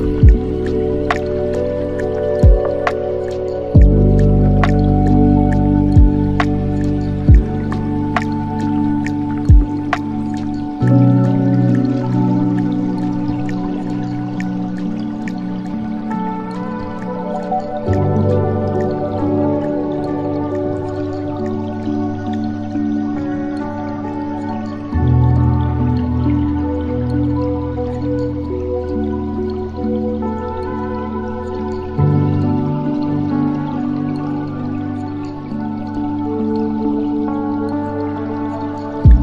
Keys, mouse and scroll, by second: 3.5 shift+a, 7.8-8.9 alt+right drag, 8.9-11.2 middle drag, 11.2-15.0 drag, 15.0-15.4 scroll down 8, 15.4-17.5 middle drag, 17.5-18.1 scroll down 4, 18.1-18.9 middle drag, 18.9 click, 20.5 click, 22.0-24.3 middle drag, 24.3 click, 29.1-30.5 middle drag, 30.5-36.0 drag, 38.0-38.3 scroll down 4, 38.3-39.2 middle drag.